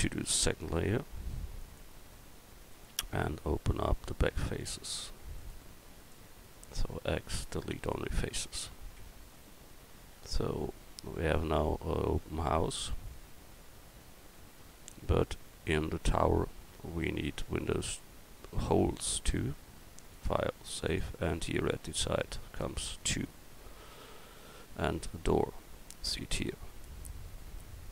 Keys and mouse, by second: 0.4 m, 3.1 Tab, 6.6 x, 9.0 Tab, 13.7-16.9 middle drag, 24.5 KP_1.